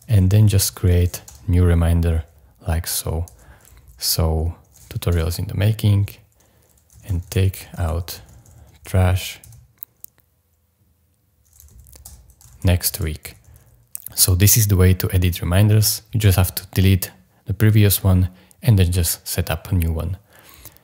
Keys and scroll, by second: 0.0-1.1 typing, 1.3 Return, 3.3 super+v, 5.1 Return, 6.7-9.4 typing, 11.7-13.9 typing.